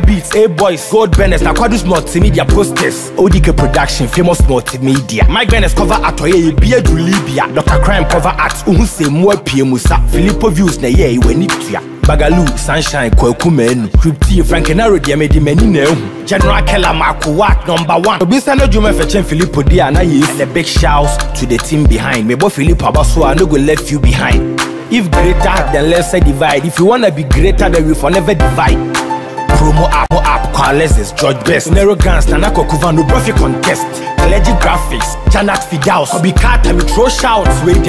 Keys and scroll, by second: 4.0 Return, 5.1 ctrl+d, 13.0 ctrl+t, 15.8 Return, 22.8 ctrl+d, 23.5 ctrl+t, 29.1 Return, 29.4 Up.